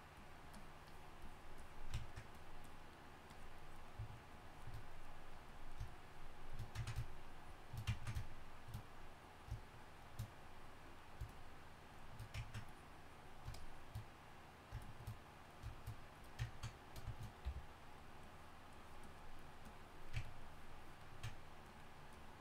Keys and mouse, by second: 17.4 f.